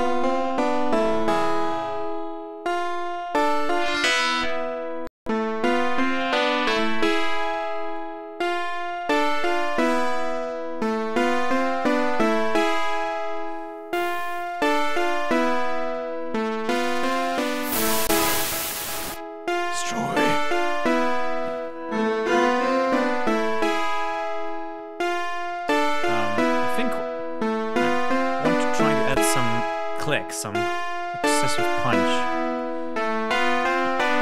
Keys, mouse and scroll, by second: 0.4-2.3 scroll up 8, 3.6-5.3 drag, 5.6-7.7 drag, 7.8-9.0 drag, 9.2-11.9 drag, 12.0 click, 12.5 click, 13.2-15.7 drag, 15.8-19.7 drag, 21.5-24.3 drag, 31.9 click.